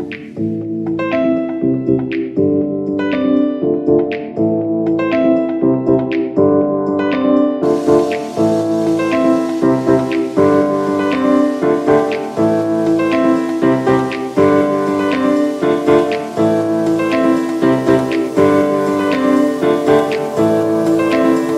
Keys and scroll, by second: 0.2 super+x, 1.0 v, 10.9 v, 15.0 v, 15.6 super+x, 17.0 v.